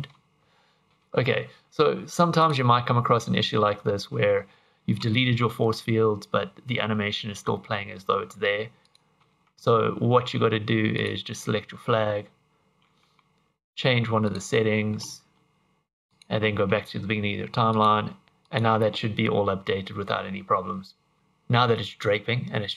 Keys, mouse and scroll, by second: 0.9 Escape, 2.4 click, 8.9 click, 11.0 click, 14.3 click, 16.1 click, 17.7 click, 18.2 Escape, 18.2 click, 18.5 click.